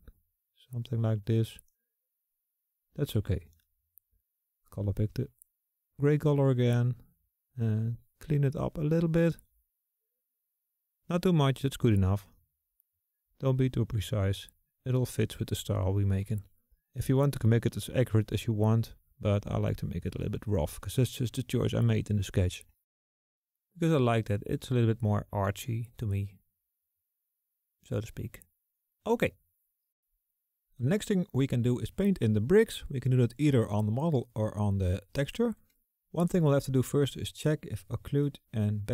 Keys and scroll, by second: 6.2 s.